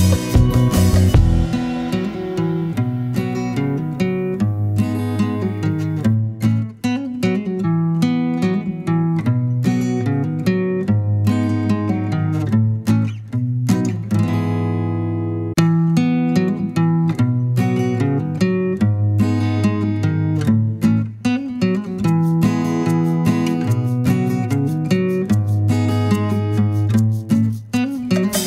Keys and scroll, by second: 1.6-2.5 scroll down 2, 2.5-2.8 scroll down 1, 2.8-3.6 scroll up 1, 14.3 Down, 15.0 Down.